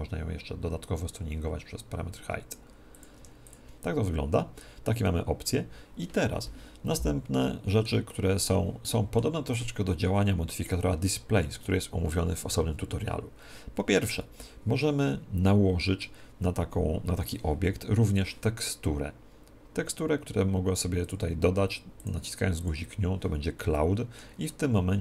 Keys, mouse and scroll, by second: 7.3-11.2 middle drag, 15.4-17.4 middle drag, 21.0-25.0 drag, 23.5-25.0 middle drag.